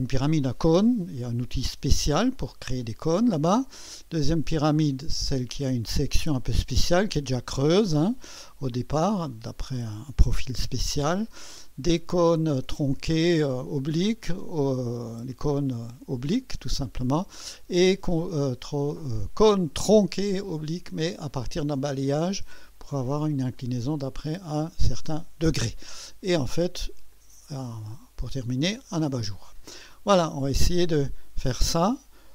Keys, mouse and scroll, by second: 4.2-10.4 drag, 11.9-14.4 drag, 15.3-17.4 drag, 19.8-21.3 drag, 23.5 click, 27.1-30.2 drag, 30.9 right click.